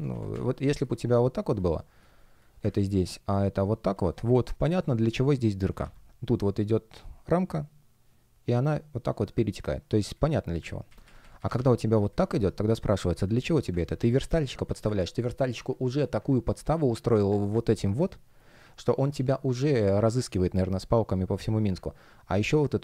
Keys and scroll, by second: 4.4 shift+p, 5.7 super+z, 10.8 super+z, 12.3 shift+p, 13.7 super+z, 18.5 space.